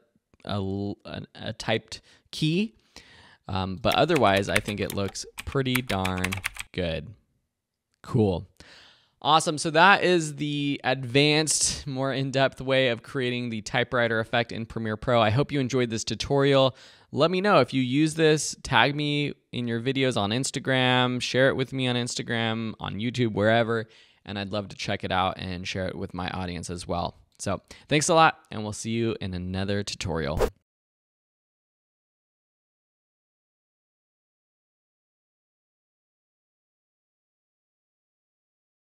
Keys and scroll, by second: 3.8 space, 11.9 space.